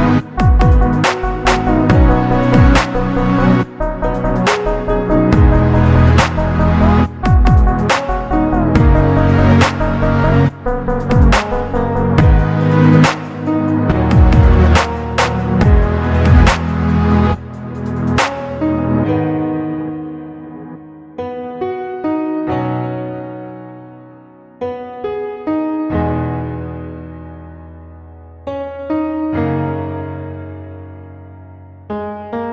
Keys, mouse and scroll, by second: 2.2 click, 3.1 click, 4.5-6.7 drag, 8.7 click, 9.2-9.7 scroll down 2, 9.7-10.9 middle drag, 12.4 click, 14.6 click, 15.4 click, 16.3 click, 16.8 click, 17.7-19.8 drag, 22.1 click, 23.5 click, 24.0 click, 24.5-25.7 drag, 26.0-26.4 scroll down 2, 26.9-28.2 middle drag, 26.9 scroll down 1, 29.0-29.5 shift+middle drag, 30.8 click.